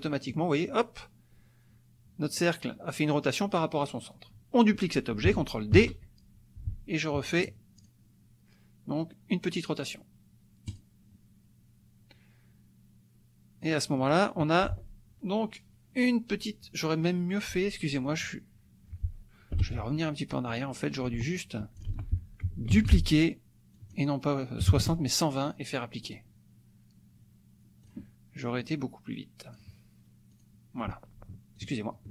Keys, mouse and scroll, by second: 0.1 click, 5.7 ctrl+d, 7.8 click, 10.7 click, 13.6 click, 19.5 Delete, 20.5 click, 21.4 click, 21.9 ctrl+z, 22.7 ctrl+d, 23.8 click, 24.7 KP_2, 25.3 KP_0, 26.0 click, 27.8 click, 28.6-29.8 drag, 30.3 click, 31.6 shift+click.